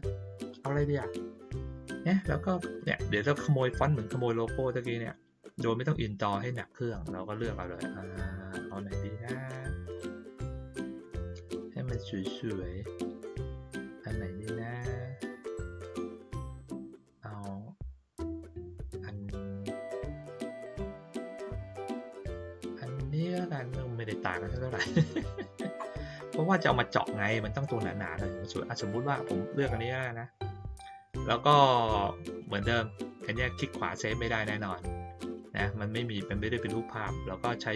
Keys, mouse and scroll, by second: 0.1 middle click, 0.1-1.3 scroll down 5, 0.7 middle click, 1.3 middle click, 2.2-5.8 scroll down 3, 2.7 middle click, 2.9 middle click, 8.6-9.0 scroll down 2, 9.2 middle click, 9.6 middle click, 9.6-10.0 scroll down 2, 12.6-13.4 scroll down 3, 13.4-15.3 middle drag, 15.4 middle click, 16.0-17.0 middle drag, 17.1-18.5 scroll down 2, 18.5-20.3 scroll down 4, 20.3 middle click, 20.8 middle click, 21.6-22.7 middle drag, 22.8 middle click, 25.1 middle click, 25.3-25.8 scroll down 2, 25.7 middle click, 33.4 right click, 36.1 click.